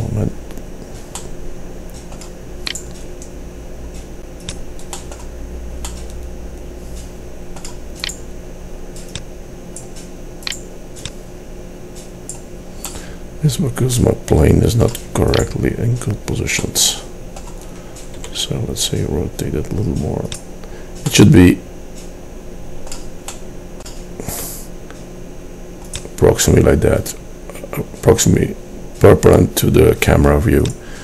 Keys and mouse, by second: 0.0-1.2 drag, 3.3-4.4 right drag, 9.3-10.4 right drag, 10.5-12.2 right drag, 18.3 r, 24.5 r, 24.7-26.0 drag.